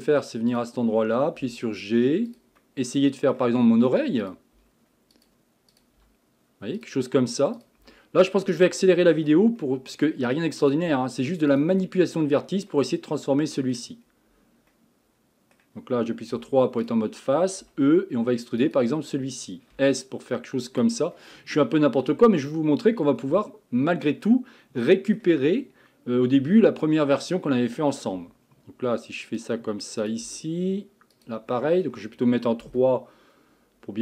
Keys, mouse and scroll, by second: 0.5 click, 1.4 g, 2.6-4.2 middle drag, 4.2 click, 4.6 g, 5.7 click, 6.0 g, 7.6 click, 7.8 g, 8.8-10.6 middle drag, 10.6 click, 10.9 g, 11.9-14.0 middle drag, 14.0-14.7 scroll down 1, 14.7-16.3 middle drag, 16.3 3, 16.8 click, 17.6 e, 19.7 s, 21.2 middle click, 22.1-22.4 scroll down 3, 22.4-25.4 middle drag, 27.2 click, 28.1 g, 30.0 click, 30.2 g, 31.5-32.8 middle drag, 32.8 KP_3.